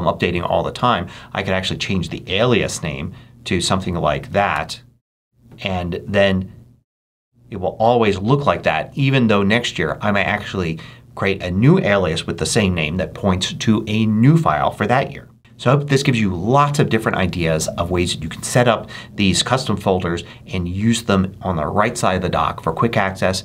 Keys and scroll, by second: 2.5 BackSpace, 4.0 BackSpace, 4.4 Return.